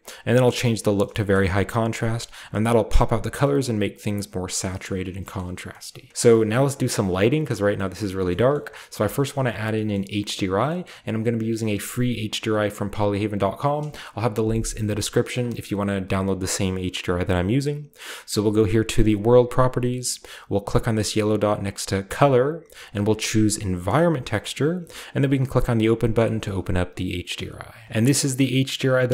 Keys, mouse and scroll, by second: 1.2 click, 2.1-4.0 shift+middle drag, 4.1 click, 4.7-5.8 shift+middle drag, 5.7-6.1 scroll up 1, 6.1 ctrl+b, 6.4-7.4 middle drag, 7.7-8.1 middle drag, 8.2 middle click, 8.5 shift+middle click, 9.2-10.9 shift+middle drag, 10.9-12.7 scroll up 1, 18.4 click, 22.2 click, 23.8 click, 27.8-29.1 drag, 27.8 typing.